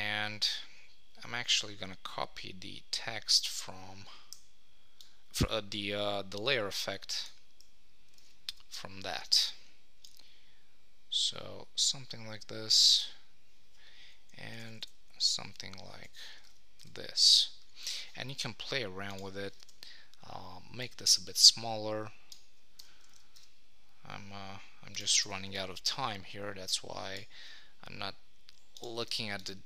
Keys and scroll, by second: 8.3 super+s, 14.5 Up, 16.4 super+s, 19.6 super+t, 23.1 super+s.